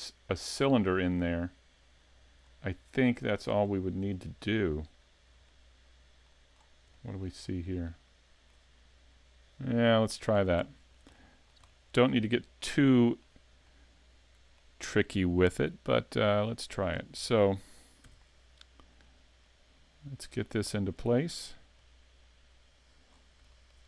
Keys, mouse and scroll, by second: 2.4-2.9 scroll down 3, 2.9 shift+middle click, 3.6-4.1 scroll down 2, 4.1 shift+middle click, 5.0-5.5 scroll down 2, 5.5 shift+middle click, 6.5 scroll up 6, 7.0 shift+middle click, 7.4 scroll up 1, 7.8 shift+middle click, 10.3 scroll up 2, 10.6 shift+middle click, 11.1 middle click, 11.6 shift+scroll up 1, 11.7 shift+middle click, 12.6 middle click, 13.8 middle click, 16.3 click, 16.9 scroll down 4, 18.1 s, 19.5 click, 20.4 click, 21.8 click, 23.1 scroll up 4, 23.5 shift+middle click.